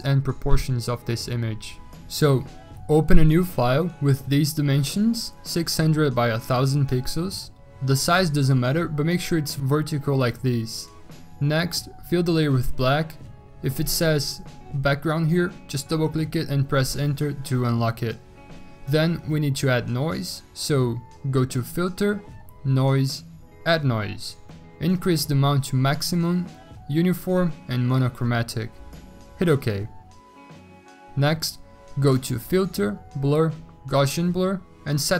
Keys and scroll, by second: 5.0-8.4 typing, 13.4 x, 14.3 alt+BackSpace, 17.2 Return.